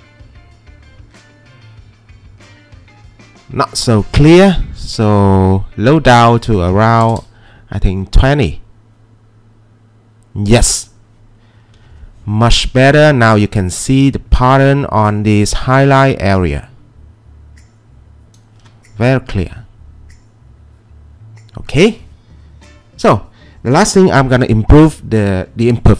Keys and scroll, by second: 1.1-1.8 typing, 6.6-7.5 typing, 9.2-9.9 typing, 11.4-12.1 typing, 18.8 Escape.